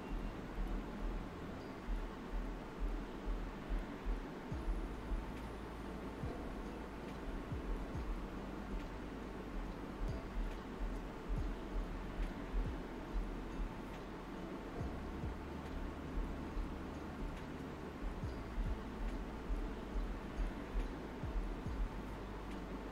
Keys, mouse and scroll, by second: 0.4-6.0 drag, 6.0 ctrl+z, 7.8 space, 9.8 click, 10.0 space, 11.4-21.4 drag, 21.4 typing, 21.8-22.9 right drag.